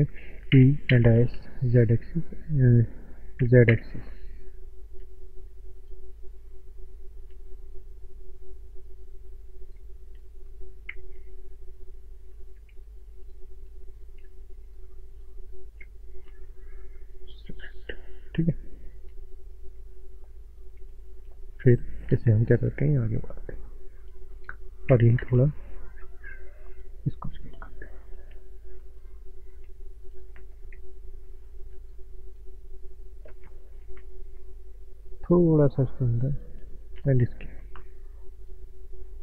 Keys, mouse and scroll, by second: 0.6 e, 0.8 z, 1.4 s, 2.0 right click, 3.4 s, 3.6 z, 5.8 click, 6.2 middle click, 9.8 ctrl+shift+click, 11.0 ctrl+z, 12.9 ctrl+alt+click, 13.7 alt+click, 14.8 ctrl+click, 16.1 middle click, 17.1 ctrl+click, 17.6 middle click, 20.2 ctrl+click, 21.2 middle click, 22.8 click, 24.4 middle click, 24.9 s, 25.2 z, 26.7 click, 27.0 scroll up 1, 27.0 middle click, 29.0 click, 29.3 middle click, 30.0 click, 30.4 middle click, 30.8 shift+middle click, 31.9 click, 33.4 middle click, 35.8 click, 36.6 middle click, 37.6 click, 38.8 middle click.